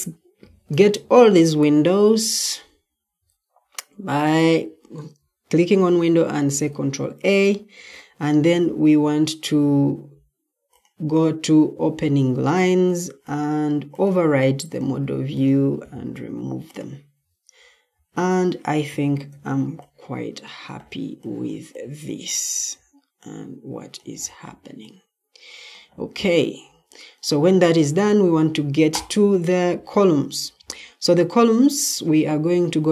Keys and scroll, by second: 6.4 ctrl+a, 7.6 ctrl+t, 17.8 Escape, 19.2 o, 29.6 Escape.